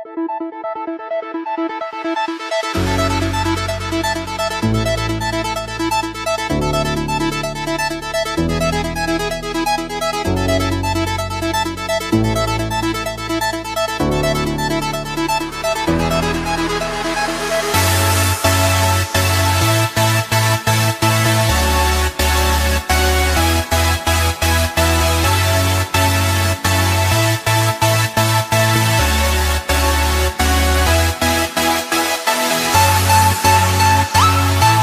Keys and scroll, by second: 0.0 ctrl+-, 4.9 ctrl+=, 5.1 space, 6.3 ctrl+=, 7.5 ctrl+z, 8.8 space, 11.1 ctrl+z, 12.3 ctrl+z, 16.3 space, 29.0 space.